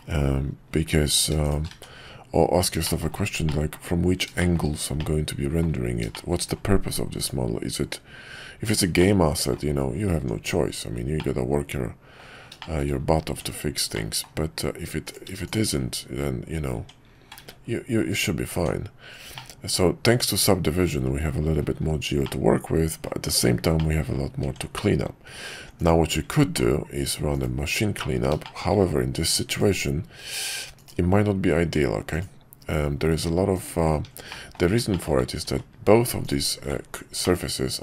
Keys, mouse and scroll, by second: 1.1 click, 1.4 shift+click, 2.8 middle click, 3.1-3.4 scroll down 1, 3.4 middle click, 4.4 middle click, 5.0 middle click, 6.1 shift+middle click, 7.2-9.0 drag, 9.0 middle click, 10.1 Tab, 11.1-12.2 middle drag, 12.6 middle drag, 13.3 Tab, 13.9 middle click, 16.7 Tab, 17.3 ctrl+`, 18.5 Tab, 19.4-20.8 middle drag, 22.2 middle click, 23.8 middle click, 24.4 Tab, 28.5 shift+middle click, 29.5 ctrl+click, 34.4 middle click, 35.0 shift+middle click, 35.5 ctrl+z, 37.3 middle click.